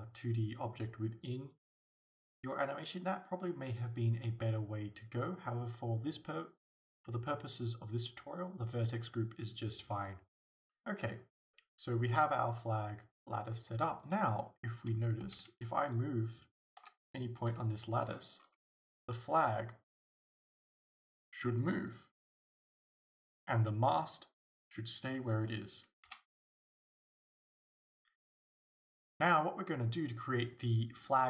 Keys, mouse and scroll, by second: 14.1 right click, 15.3 Tab, 15.9-16.9 right drag, 16.9 o, 22.0 right click, 22.9 g, 24.8 right click, 26.1 Tab.